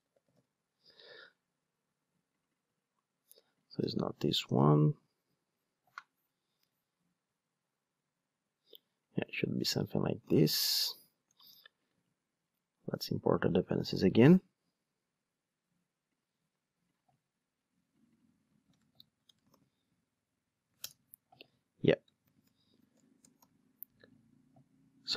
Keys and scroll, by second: 19.4 super+v, 20.8 alt+Return.